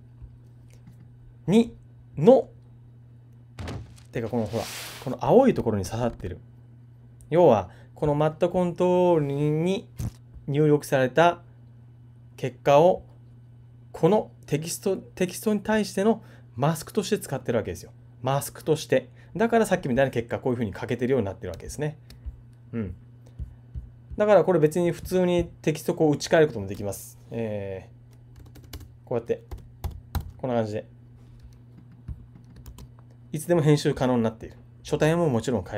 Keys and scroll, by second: 32.6 super+z.